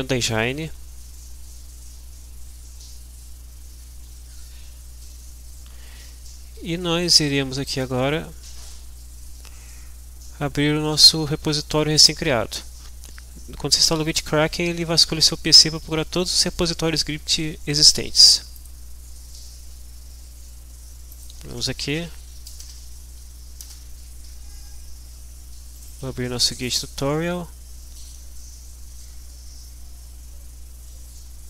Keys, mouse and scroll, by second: 0.1-0.9 scroll down 2, 1.3-1.6 scroll down 2, 1.8-2.6 scroll down 2, 2.7-3.9 scroll down 2, 4.7 scroll down 2, 5.2-5.8 scroll down 2, 7.9 click, 18.5 click, 21.1 click, 21.6-22.5 typing, 22.6 Return, 23.3 Down, 23.6 Return, 25.8 click, 27.2 click.